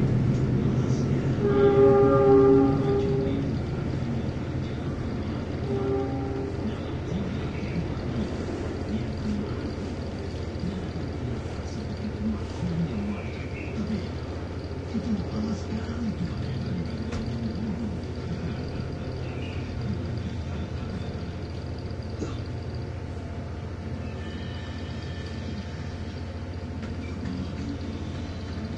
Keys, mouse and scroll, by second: 0.6 click, 3.5 click, 5.6-7.9 drag, 9.1 click, 14.6 click, 16.3 3, 18.8 click, 19.9-22.4 drag, 24.0 click, 25.0 click, 26.7-28.7 typing.